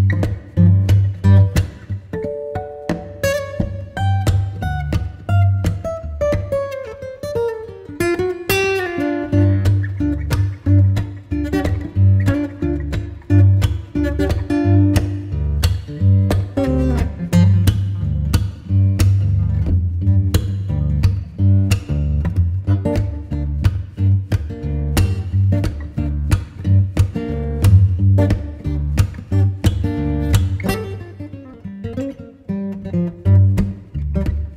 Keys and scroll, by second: 4.5 b, 11.5 v, 12.8 super+m, 33.3 Return.